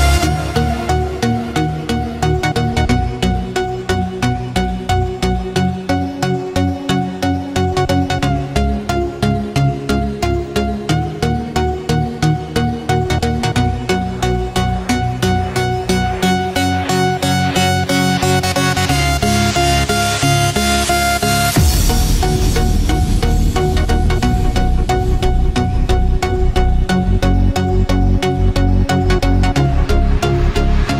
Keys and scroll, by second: 1.7 ctrl+-, 3.2 ctrl+=, 9.6 ctrl+-, 10.2 ctrl+=.